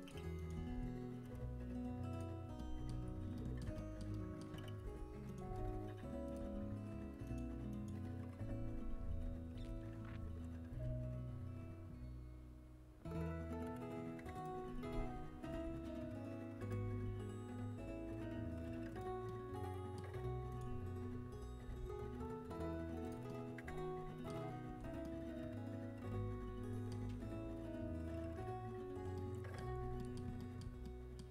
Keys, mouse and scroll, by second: 0.5 g, 4.5 z, 5.2 z, 5.4 g, 6.5 z, 9.7 KP_3, 9.7 KP_1, 11.1 g, 16.5 r, 16.8 g, 20.2 middle click, 21.1-22.5 drag, 21.6 g, 23.2-27.7 middle drag, 24.6 a, 29.2-31.3 middle drag.